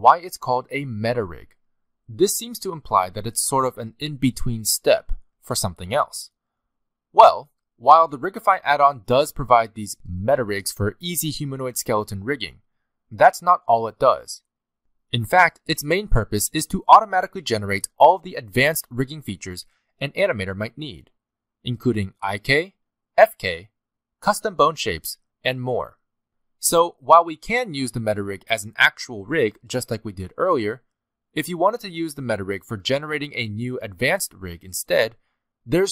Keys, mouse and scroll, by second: 5.1 middle click, 7.0 click.